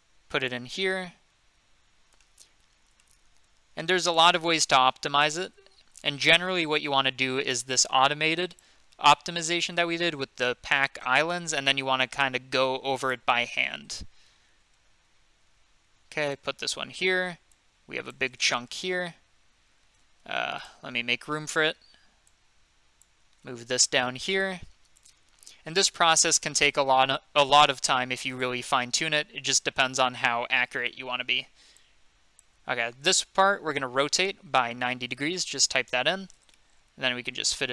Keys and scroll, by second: 6.8 g, 14.6 g, 19.8 g, 23.3 g, 26.8 g, 34.0 r, 35.1-36.0 typing, 37.2 typing.